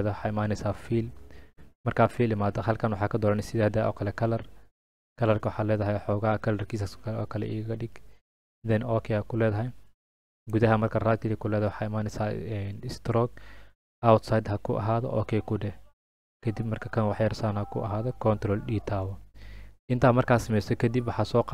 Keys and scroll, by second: 18.9 ctrl+d.